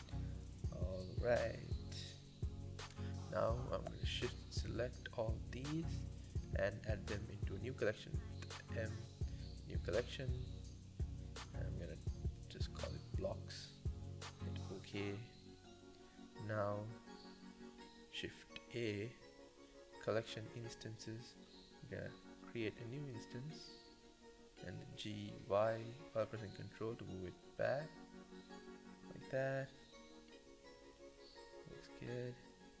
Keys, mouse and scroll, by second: 0.1-0.4 scroll down 6, 0.4-2.5 middle drag, 2.6-3.8 middle drag, 3.8 click, 4.2 shift+click, 5.2 m, 8.2 m, 14.3 click, 15.0 click, 15.6-16.2 scroll down 2, 17.6 ctrl+a, 18.2 shift+a, 22.2-22.8 middle drag, 22.8 g, 23.5 scroll down 1, 23.8-24.2 middle drag, 24.2 g, 26.1 KP_7, 26.8 g, 29.2-31.2 middle drag, 31.8-32.8 scroll up 11, 32.2 shift+middle click.